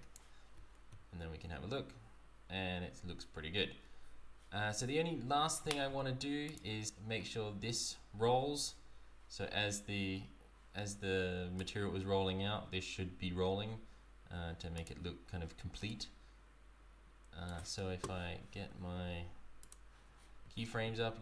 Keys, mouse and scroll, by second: 0.5 z, 6.5 click, 11.6 click, 15.9 right click, 19.6 click.